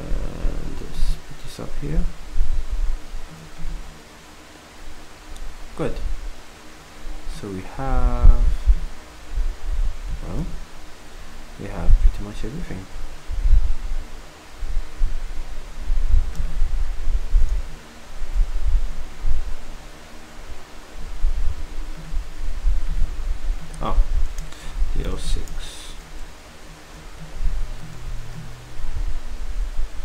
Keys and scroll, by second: 25.6 Up, 26.7 v, 28.1 z.